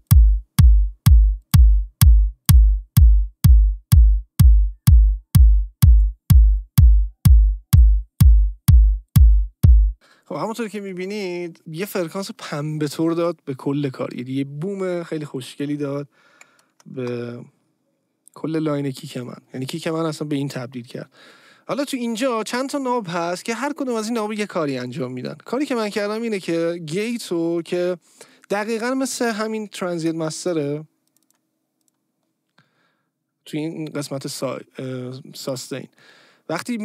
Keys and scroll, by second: 9.9 space, 17.0 Return.